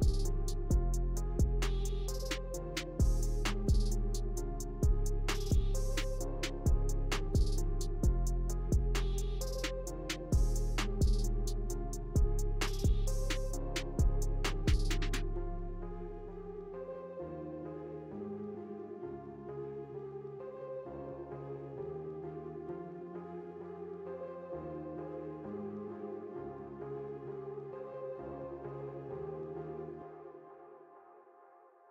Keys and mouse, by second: 0.0-0.7 typing, 0.0 middle click, 0.2 Tab, 0.5 click, 0.7 middle click, 1.1 ctrl+KP_1, 1.7 middle click, 2.2 ctrl+KP_1, 2.6 Tab, 2.6-6.2 typing, 3.3 middle click, 3.7 ctrl+KP_1, 3.9 ctrl+KP_1, 4.1 click, 4.3 middle click, 5.4 Tab, 6.0 Tab, 6.2 middle click, 6.8 shift+middle click, 7.4 Tab, 9.0 KP_7, 9.9 ctrl+KP_1, 15.0-18.4 typing, 16.1 Tab, 17.4 ctrl+z, 18.8 ctrl+KP_1, 20.0 ctrl+KP_1, 20.0 ctrl+KP_3, 20.6-23.0 typing, 22.4 Tab, 22.7 ctrl+z, 27.5 s, 28.6-31.7 typing, 29.3 Tab, 30.7 ctrl+z.